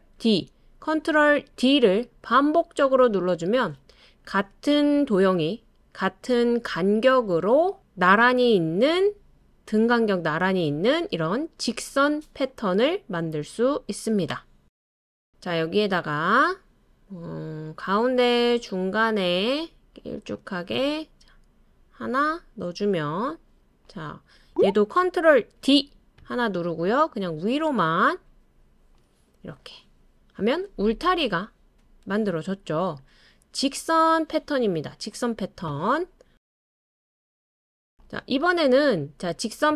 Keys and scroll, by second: 0.1 super+d, 1.5 super+d, 3.1 super+d, 25.6 super+d.